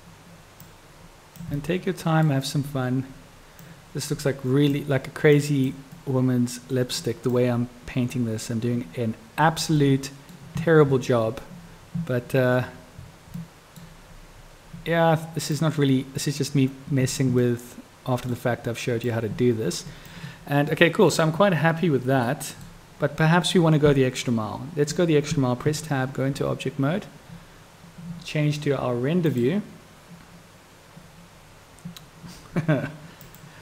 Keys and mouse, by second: 0.9-1.5 drag, 1.7-2.4 middle drag, 3.7-4.9 drag, 5.5-5.9 drag, 6.1-7.1 middle drag, 7.3-9.8 drag, 10.0-10.5 middle drag, 13.6 middle click, 15.7-17.4 drag, 17.6-18.5 middle drag, 19.2-20.2 drag, 20.8-21.3 middle drag, 22.5 middle click, 24.4-25.1 middle drag, 25.8 Tab, 29.8 click.